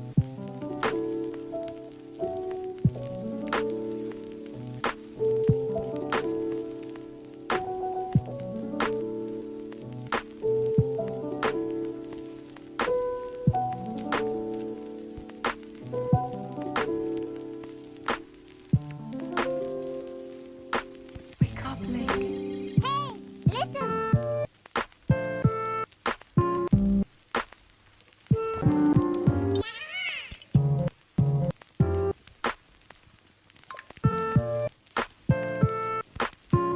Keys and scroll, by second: 21.8 ctrl+z, 23.2 ctrl+z, 26.3 ], 29.1 ctrl+z.